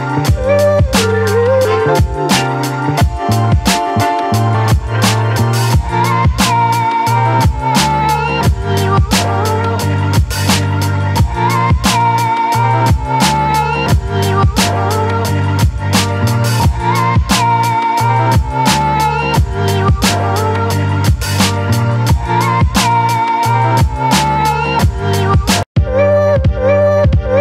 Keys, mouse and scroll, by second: 9.6 right click, 10.8 click, 13.2 ctrl+d, 13.7 v, 14.4-16.9 alt+drag, 16.9 Up, 19.7 ctrl+t, 20.6-22.3 shift+drag, 23.6-26.1 alt+drag, 26.1 ctrl+t, 27.1-27.4 shift+drag.